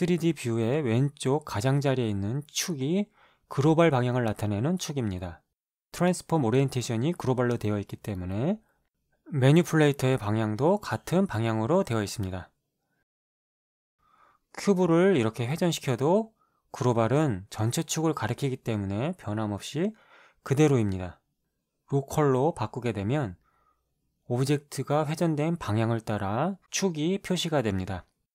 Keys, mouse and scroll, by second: 13.3-18.1 drag, 18.9 click, 22.3 click, 24.5 click, 26.5-28.3 drag.